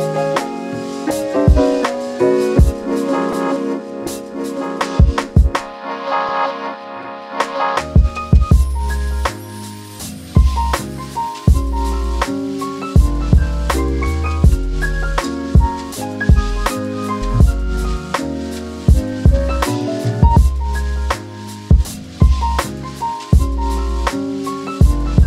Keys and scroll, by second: 5.6 c, 7.4 space.